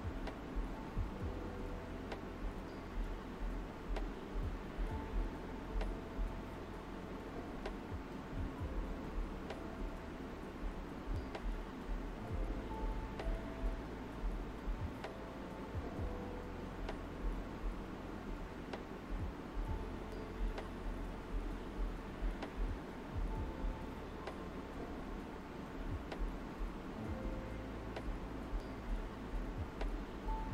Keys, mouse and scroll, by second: 1.4 alt+right click, 3.8 alt+right click, 5.1-6.4 alt+drag, 6.4 ctrl+z, 7.2-9.2 drag, 9.7 alt+right click, 11.0 alt+right click, 12.3-14.9 drag, 13.6 typing, 14.9 shift+click, 15.8 alt+right click, 21.2 alt+right click, 22.2-23.9 drag, 23.9-26.0 shift+drag, 26.0 alt+right click, 26.3 ctrl+alt+z, 29.1 ctrl+alt+right click.